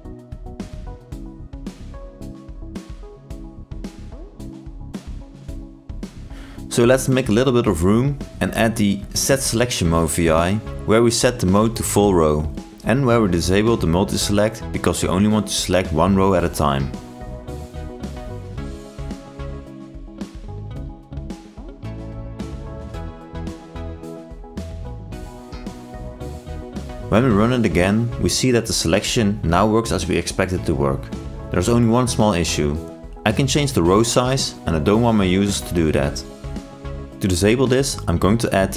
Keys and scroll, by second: 0.2 ctrl+shift+i, 11.6 ctrl+space, 15.3 ctrl+shift+i, 27.3 ctrl+e, 27.9 ctrl+r.